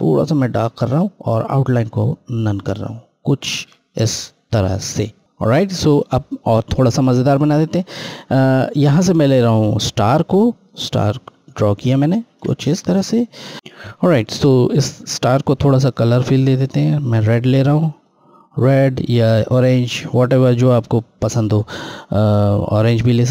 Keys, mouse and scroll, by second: 1.7 right click, 2.1 right click, 4.6 click, 7.0 click, 10.6 ctrl+click, 15.8 click, 15.9 click, 22.0 click.